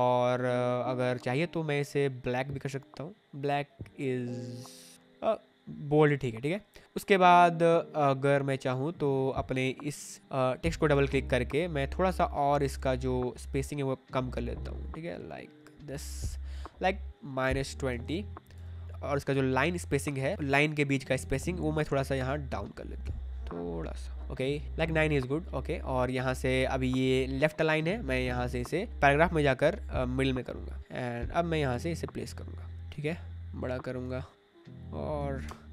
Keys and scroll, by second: 10.2 Escape, 10.8 Escape, 17.6 -, 17.9 2, 18.5 Tab, 18.8 ctrl+z, 24.6 ctrl+z, 35.4 Return.